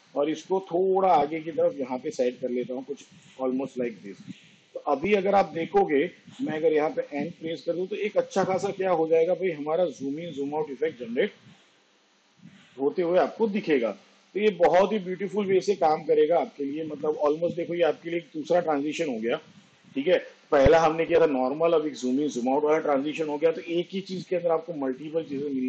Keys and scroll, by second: 7.5 n, 10.1 space, 20.8 space.